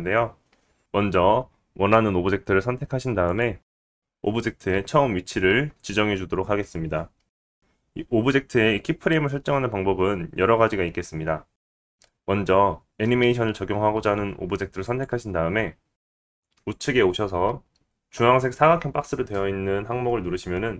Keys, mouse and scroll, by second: 3.2 click, 5.8 g, 15.7 click, 18.4 click, 18.6-20.7 middle drag.